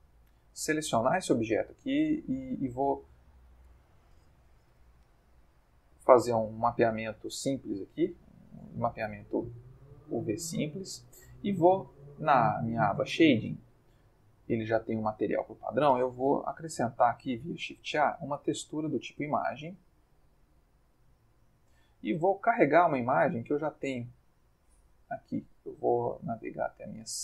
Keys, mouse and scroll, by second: 2.0 Tab, 3.7 Tab, 4.7 u, 8.0 click, 9.2 click, 10.0 middle click, 10.7 Tab, 12.2 click, 14.5 middle click, 15.2 ctrl+middle click, 16.3 shift+a, 19.2 click, 19.9 click, 20.7-21.6 drag, 22.4 click, 25.7 click, 26.9 click.